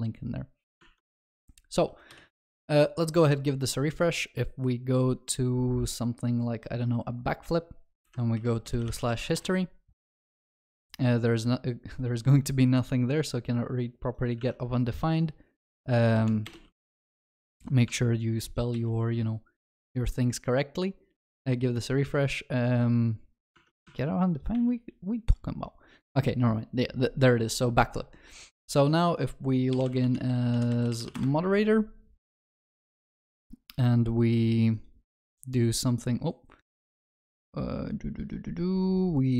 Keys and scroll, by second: 17.6 ctrl+s.